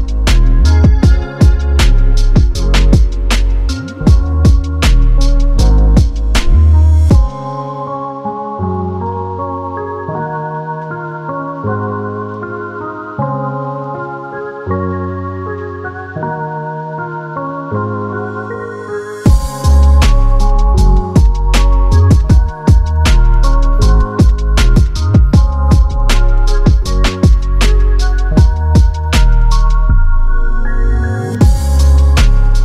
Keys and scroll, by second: 19.2 space, 22.2 u, 24.4 space.